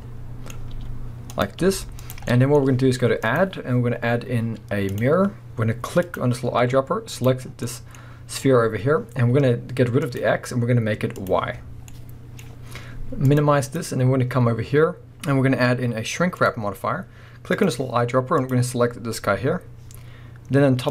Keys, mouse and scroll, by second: 0.8 r, 1.4 click, 1.6 g, 2.1 click, 2.3 middle click, 3.2-6.2 drag, 7.5 scroll down 2, 7.7-10.0 middle drag, 7.9-10.0 scroll up 2, 10.0 click, 11.1 click, 11.5-11.9 scroll down 2, 11.9-13.3 middle drag, 13.3 click, 13.6-17.6 drag, 18.8-20.9 scroll up 1.